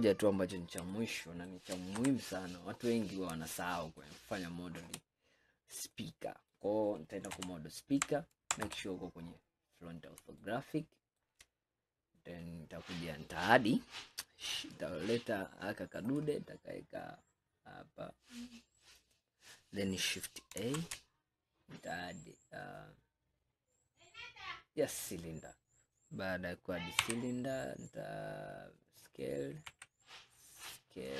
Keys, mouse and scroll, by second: 0.3 scroll up 2, 1.0-2.0 shift+middle drag, 2.0 KP_1, 2.9 scroll up 2, 3.6-5.2 shift+middle drag, 5.2-5.6 scroll up 2, 6.0-7.4 middle drag, 7.4 ctrl+KP_1, 8.7 KP_1, 9.5 scroll up 2, 10.5-11.7 shift+middle drag, 11.7 scroll up 1, 16.1-19.2 drag, 20.8 shift+a, 27.1 s, 29.8 s.